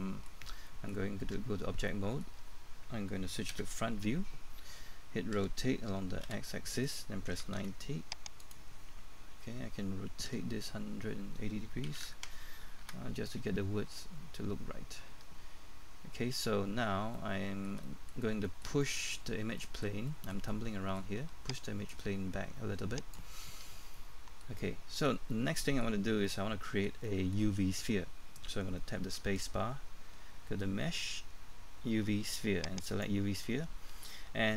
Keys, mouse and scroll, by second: 1.2 Tab, 1.9 middle click, 3.5 KP_1, 5.4-7.8 typing, 8.4 click, 10.3 r, 11.9 KP_1, 13.9-15.1 scroll up 1, 15.1-17.1 scroll down 1, 17.1 middle click, 18.2 scroll down 1, 18.5 middle click, 19.3 scroll up 1, 19.6 middle click, 22.9-23.9 drag, 23.9 middle click, 29.9 space, 32.8-34.5 drag.